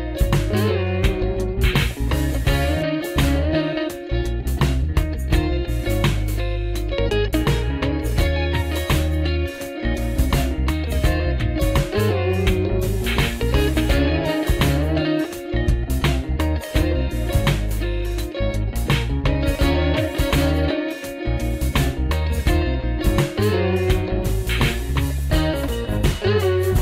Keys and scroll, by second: 0.5 super+Right, 1.2 super+Left, 1.8 super+Left, 2.9 super+2, 5.4 super+3, 7.4 super+2, 9.1 super+1, 10.9 super+2, 12.1 super+3, 13.5 super+1, 18.0 alt+super+Right, 19.6 alt+super+Right, 21.3 alt+super+Left, 23.8 alt+super+Left, 26.0 alt+super+Right.